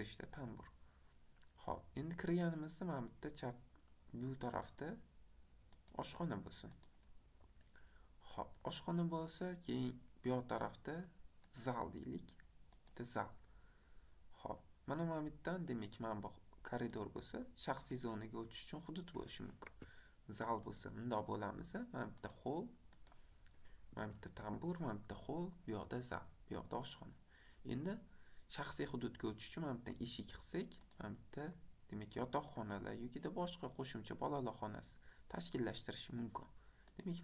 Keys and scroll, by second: 19.8 Escape, 23.9 Escape.